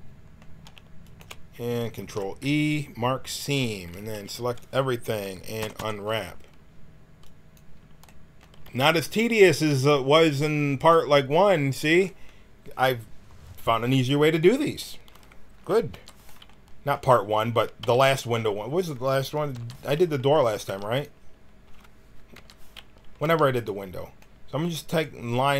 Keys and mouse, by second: 2.0 ctrl+e, 3.9 a, 4.1 a, 5.5 u, 5.7 u, 7.2 click, 8.6 g, 10.7-15.9 drag, 15.9 l, 17.7 g, 19.5 l, 20.6 g, 22.3 l, 23.2 g.